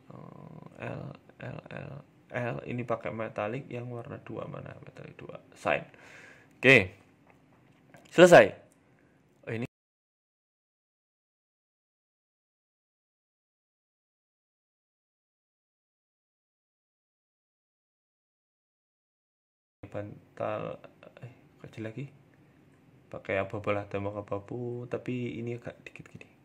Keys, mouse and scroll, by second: 0.0-1.3 typing, 3.1-3.5 scroll up 1, 3.1 l, 3.9-4.4 scroll down 1, 4.4 click, 4.4-5.0 scroll down 1, 5.0 click, 5.3 Tab, 5.5 middle click, 5.7-6.4 scroll down 4, 6.0 middle click, 6.5 middle click, 6.9-7.4 scroll down 2, 7.1 middle click, 7.7-8.3 scroll up 1, 8.8-9.1 scroll up 3, 9.2 shift+middle click, 9.4 middle click, 9.9 right click, 10.3 middle click, 11.5 click, 11.7 click, 14.1 ctrl+z, 14.9 ctrl+z, 16.7 click, 19.3 ctrl+z, 20.8 click, 21.1 click, 24.1 click, 25.5 scroll down 1, 25.6 Tab, 25.8 middle click, 26.0-26.4 scroll down 2.